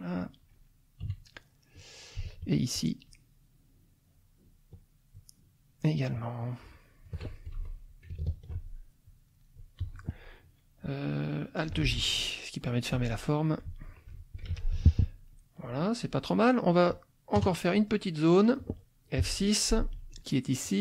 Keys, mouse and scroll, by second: 1.1 KP_Subtract, 1.6 click, 2.7-5.3 shift+drag, 6.1-7.2 shift+drag, 7.6 shift+F2, 8.3 ctrl+click, 9.0 ctrl+click, 11.9 alt+j, 12.9 click, 13.8 ctrl+click, 14.5 ctrl+z, 14.7 ctrl+middle click, 15.5 ctrl+click, 16.0 click, 17.3 KP_Add, 17.8 click, 19.2 F6, 19.4 click, 20.6 click.